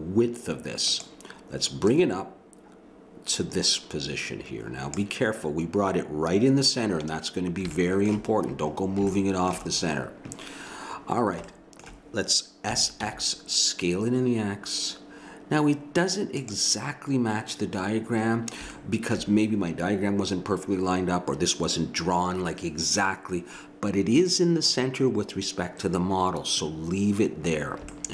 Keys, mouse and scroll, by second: 1.9 click, 7.8 middle click, 12.7 s.